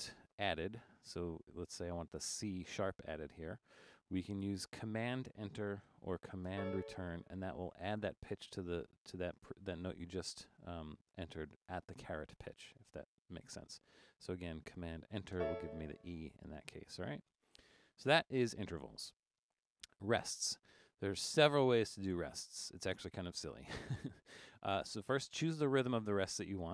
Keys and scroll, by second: 6.5 super+Return, 10.5 Up, 10.6 Up, 19.1 Down, 19.3 Down, 25.4 Down.